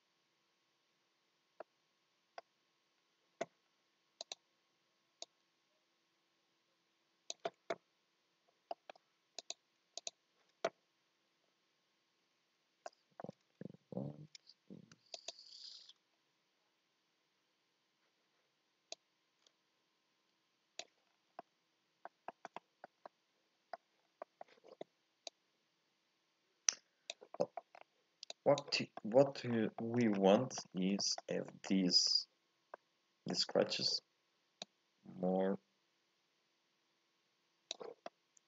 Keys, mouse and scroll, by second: 5.3 click, 10.1 ctrl+shift+click, 19.0-21.0 drag, 21.0-21.4 scroll down 1, 21.4-22.9 middle drag, 22.9 scroll up 1, 23.0 middle click, 24.0 scroll up 1, 24.2-25.3 shift+middle drag, 25.3-28.4 drag, 29.0 middle click, 29.5 scroll down 2, 29.8 shift+middle click, 30.0 scroll up 1, 30.1 scroll down 1, 30.3 middle click, 30.7 scroll up 2, 31.0-34.7 shift+middle drag, 34.7-37.6 drag, 38.1 middle click.